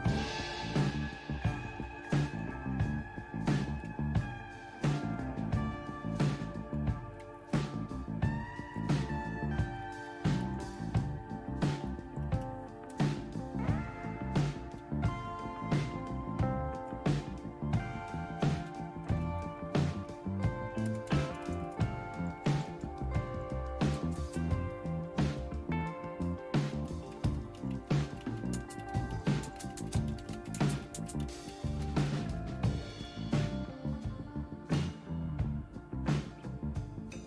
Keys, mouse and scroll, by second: 0.0 Return, 0.0 typing, 2.9 Down, 7.5-8.7 Up, 9.0 Down, 9.5 Down, 9.6 Down, 9.6 Down, 10.4 Return, 10.6 Return, 12.1 Up, 12.9 Return, 14.8-17.3 typing, 17.3 Return, 18.7 #, 20.8 Return, 21.3 Return, 21.4 Return, 22.2 Up, 22.4 Up, 22.6 Up, 22.7 Up, 23.3 Left, 24.0 space, 24.3 space, 26.7-33.4 typing.